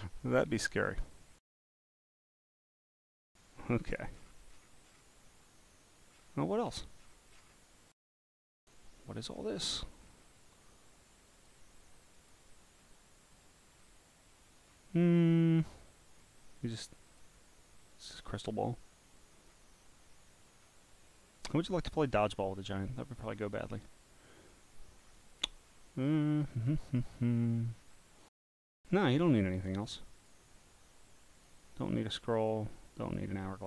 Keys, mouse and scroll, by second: 0.3 click, 0.9 click, 2.4 click, 3.8-4.5 scroll down 1, 4.5-5.7 scroll down 2, 6.1-7.9 scroll up 10, 9.3 scroll up 5, 10.0 scroll up 4, 11.4 click, 12.2 click, 12.8 scroll down 1, 12.8 scroll down 1, 12.9 scroll down 1, 13.6 scroll down 1, 13.7 scroll down 1, 14.4 scroll up 3, 15.2 scroll up 2, 15.7-16.2 scroll down 4, 17.0 click, 18.2 click, 18.8-19.4 scroll up 6, 19.8 scroll down 1, 19.9 scroll down 1, 20.5 scroll down 1, 20.5 scroll down 1, 20.6 scroll down 1, 21.4 scroll down 1, 21.5 scroll down 1, 22.0 scroll down 1, 22.0 scroll down 1, 22.6 scroll, 23.1 scroll, 23.9 scroll, 24.4 scroll, 24.5 right click, 25.0 scroll up 1, 25.3 click, 25.7-27.0 scroll up 12, 27.0 scroll down 1, 27.1 scroll down 1, 27.8 scroll down 1, 27.8 scroll, 30.2 click, 31.3 click, 32.4 click, 33.0 click.